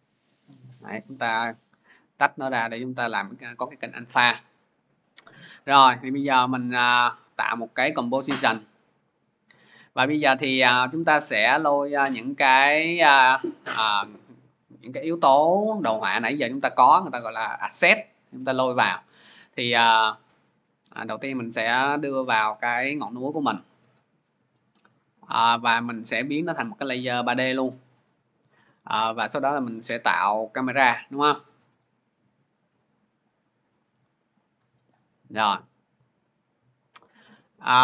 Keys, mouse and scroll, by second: 0.1 click, 1.1 click, 1.6 click, 3.3 click, 5.8 click, 18.8 click, 19.9 click, 27.3 click, 29.2 click, 33.1 click, 34.0 click.